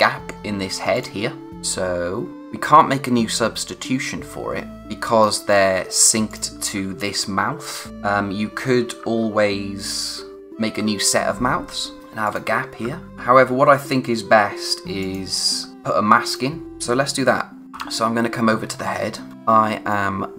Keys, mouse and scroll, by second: 0.9 click, 7.9 typing, 11.8-13.0 typing, 11.8 scroll down 1, 12.2 click, 13.1-13.7 scroll up 1, 15.0 click, 15.5 scroll down 1, 16.2 click, 16.8-17.6 scroll up 1, 17.7 o, 19.3 space, 19.9 click, 20.2 space.